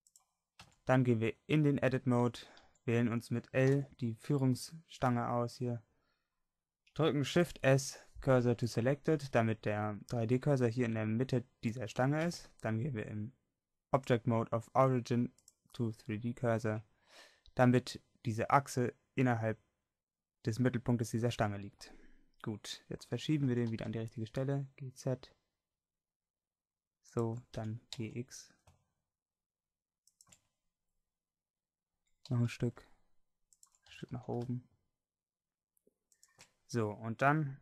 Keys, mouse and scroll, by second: 0.1 click, 0.7 Tab, 2.9 a, 3.7 l, 7.5 shift+s, 12.3 Tab, 17.4-21.5 middle drag, 22.7 middle click, 23.8 g, 27.1 g, 27.6 g, 32.1 g, 33.9 g.